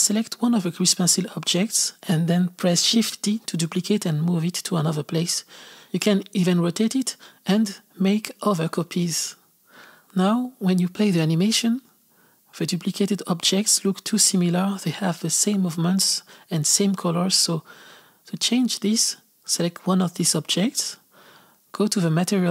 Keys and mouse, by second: 0.5 KP_0, 2.7 shift+d, 6.2 r, 7.9 shift+d, 8.8 g, 9.0 r, 10.3-13.3 drag, 16.3 click, 17.4-19.8 drag, 20.2-22.5 drag.